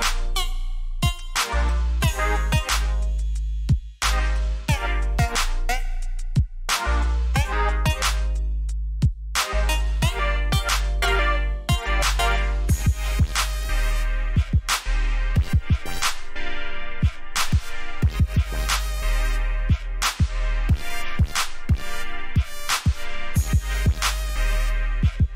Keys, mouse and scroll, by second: 2.7 v, 3.2 click, 7.1 alt+scroll up 1, 7.9 alt+scroll down 1, 8.7 click, 11.1 ctrl+t, 11.7 right click, 13.9 click, 16.9 alt+scroll up 1, 17.9-18.3 alt+scroll down 2, 18.8 click, 22.3 alt+scroll up 1, 23.2-23.6 alt+scroll down 1, 24.0 click.